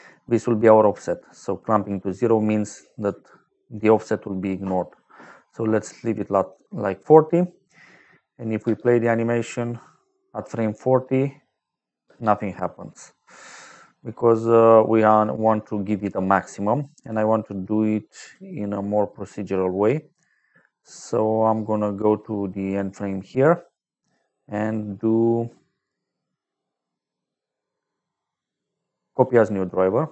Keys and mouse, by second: 2.5 click, 3.7 click, 5.8 click, 7.0 middle click, 8.6 space, 12.0 space, 12.9 middle click, 15.9 middle click, 18.1 click, 23.6 right click, 29.0 click, 30.0 click.